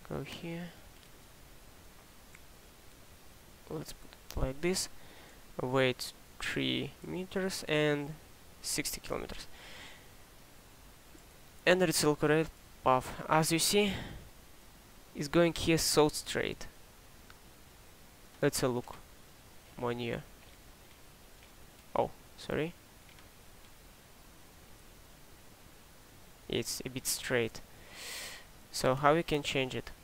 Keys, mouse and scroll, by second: 17.6 drag.